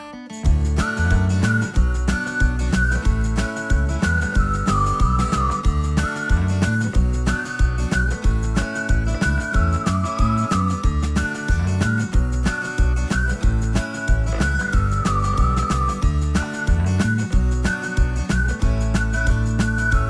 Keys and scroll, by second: 6.8 Escape.